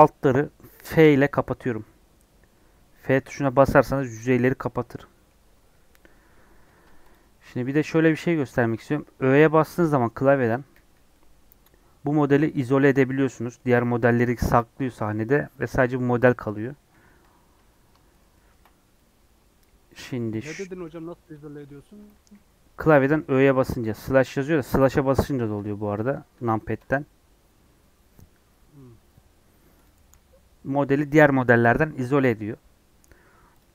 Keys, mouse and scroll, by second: 0.9 f, 4.7 scroll down 2, 4.9-6.3 middle drag, 6.3-6.7 scroll down 1, 6.7 Tab, 7.0 click, 7.4 alt+z, 8.0 click, 8.3-10.6 shift+middle drag, 10.6 /, 11.0-17.5 middle drag, 17.5 Tab, 18.1-23.1 shift+middle drag, 23.1 /, 24.9 KP_Divide, 25.5 KP_Divide, 26.3 KP_Divide, 26.7 KP_Divide, 29.8 click, 33.6 click.